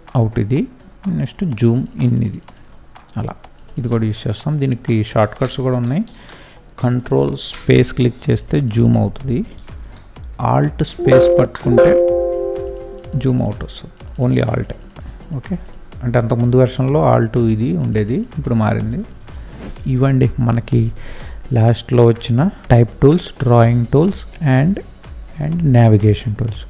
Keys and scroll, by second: 5.3 ctrl+space, 7.5 ctrl+space, 8.8 ctrl+space, 10.8 alt+space, 19.1 Escape, 20.2 ctrl+0, 25.0 space.